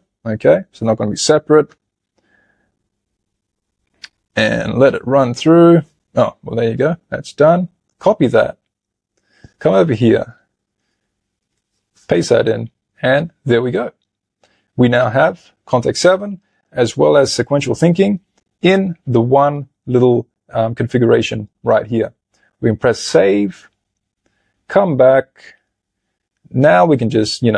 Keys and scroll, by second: 10.4 super+a, 11.4 super+v.